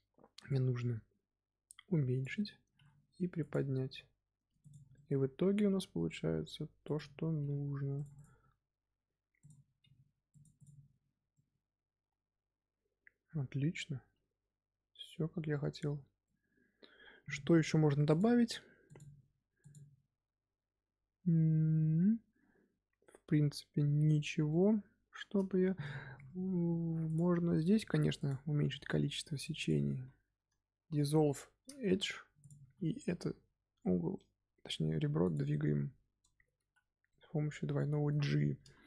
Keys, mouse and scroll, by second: 0.4-2.6 drag, 2.6 g, 3.8 middle click, 4.5 click, 4.7 scroll down 2, 4.9-6.8 middle drag, 6.8 click, 7.3 g, 8.1 click, 9.3 click, 9.7 g, 10.5 click, 11.3-14.4 middle drag, 24.4-25.2 middle drag, 25.2-25.7 scroll up 2, 25.7-26.3 shift+middle drag, 26.3-27.0 scroll up 2, 27.0 click, 27.2 Tab, 27.6 2, 28.1 alt+click, 28.6 x, 30.7 KP_1, 31.8 z, 32.3 alt+click, 33.0 g, 36.1 Tab, 36.6 z, 37.0-38.0 middle drag, 38.0-38.5 scroll up 1, 38.5 KP_1.